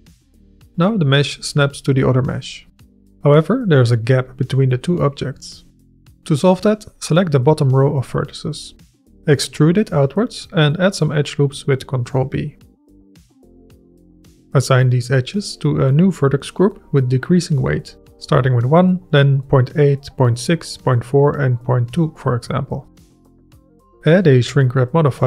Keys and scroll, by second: 1.5 g, 3.2 KP_Decimal, 5.7 KP_1, 5.9 KP_7, 6.2 Tab, 9.2 e, 9.6 Escape, 9.9 s, 12.3 ctrl+b, 22.8 Tab.